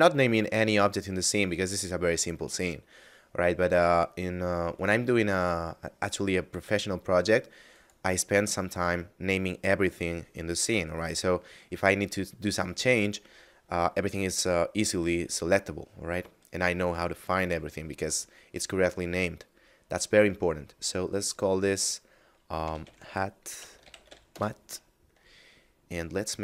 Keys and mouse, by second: 4.5 right click, 7.6 click, 22.5-24.0 typing, 24.2 Return, 25.9 click.